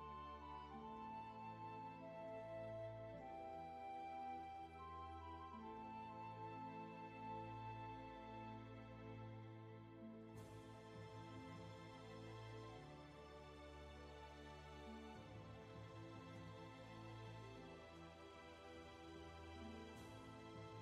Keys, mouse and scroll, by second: 5.0 scroll down 1, 5.4 space, 11.9 space.